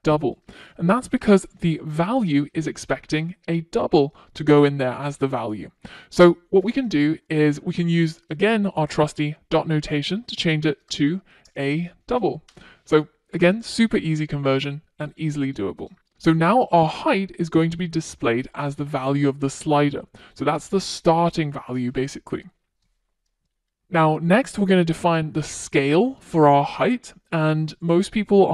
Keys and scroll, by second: 10.0 Return, 13.5 super+s.